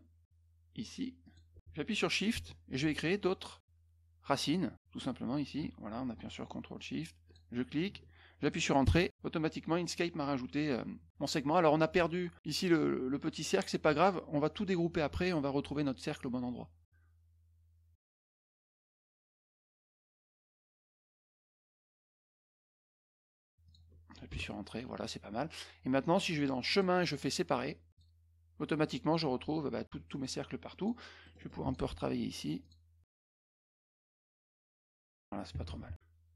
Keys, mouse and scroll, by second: 1.2 click, 4.2 shift+click, 7.2 ctrl+shift+click, 8.8 Return, 19.6 Return, 20.2 click, 21.1 click, 23.6 shift+click, 24.2 Return, 26.6 click, 27.9 click, 30.7 click, 31.2 middle click, 31.3 middle click, 31.6 click, 32.6 click, 33.3 click, 33.7-35.1 drag.